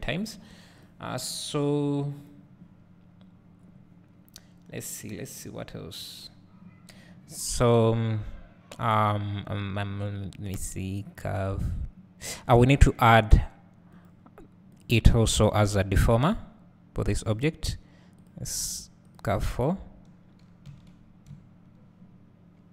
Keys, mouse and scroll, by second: 14.8-16.4 drag, 19.2-22.7 drag, 21.5 `.